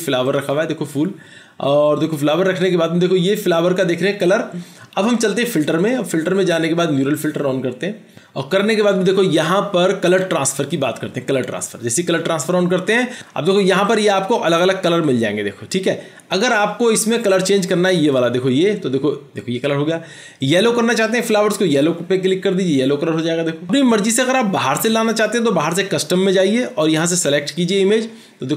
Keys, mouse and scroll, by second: 0.5 double click.